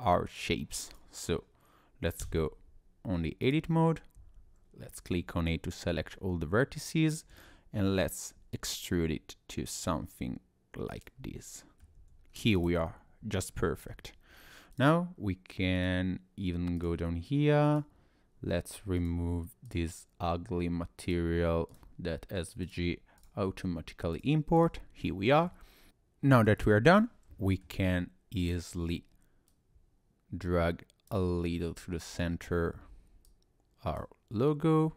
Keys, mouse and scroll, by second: 0.4 click, 2.2 Tab, 3.4 click, 4.2 a, 7.3 e, 11.3 middle click, 12.0 Tab, 12.3 scroll down 2, 12.6 click, 12.9 middle click, 14.3 scroll up 1, 14.7 click, 19.0 click, 19.7 click, 21.1 click, 21.7 click, 22.6 click, 23.2 click, 24.2 click, 24.6 click, 25.1 shift+middle click, 25.7 scroll down 2, 26.5 click, 27.5 middle click, 28.4 click, 29.5 click, 32.0 click, 33.3 click, 34.5 click.